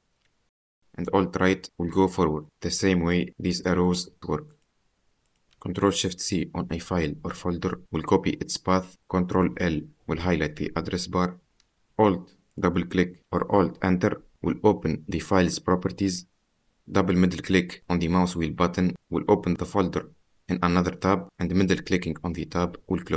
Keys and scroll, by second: 0.8 alt+Right, 1.5 alt+Right, 6.2 ctrl+shift+c, 9.8 ctrl+l, 10.9 ctrl+v, 15.9 alt+Return.